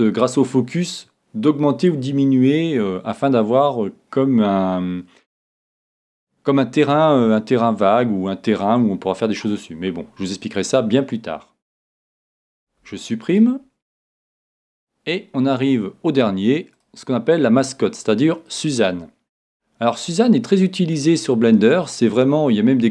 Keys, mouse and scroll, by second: 11.9 Tab, 12.6 x, 14.6 shift+a, 17.5-19.3 middle drag, 19.6-22.0 middle drag, 22.2-22.9 middle drag.